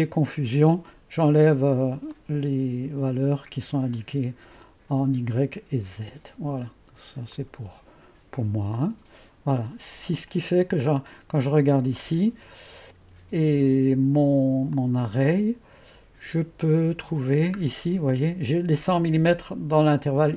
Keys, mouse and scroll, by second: 1.3 0, 2.2-3.2 drag, 4.0 click, 6.0 typing, 7.4-8.1 drag, 8.8 click, 14.8-15.6 drag.